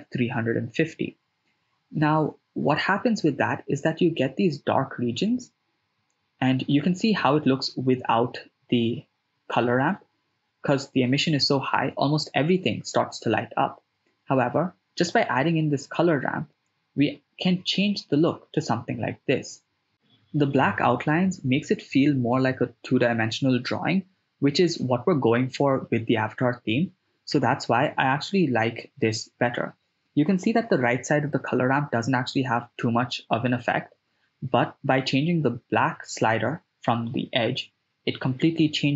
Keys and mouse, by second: 3.2 ctrl+middle click, 4.0 middle click, 4.7 middle click, 6.3-8.6 drag, 12.3 middle click, 13.9 middle click, 16.1-17.8 drag, 18.5 middle click, 20.6 shift+space, 25.9 shift+space, 27.2 ctrl+middle click, 28.5 middle click, 29.8-30.8 drag, 31.2-32.2 drag, 32.8-33.8 drag, 34.3-34.7 middle drag, 35.3-38.9 drag.